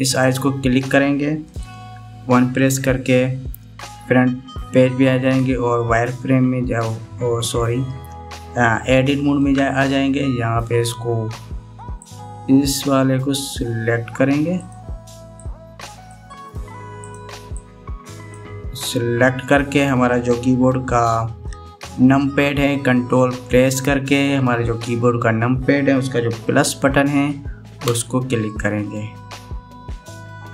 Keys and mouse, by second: 0.9 click, 2.9 KP_1, 10.1 Tab, 13.0-14.2 drag, 15.2 click, 16.0 click, 17.6 click, 18.3 click, 28.5 ctrl+KP_Add.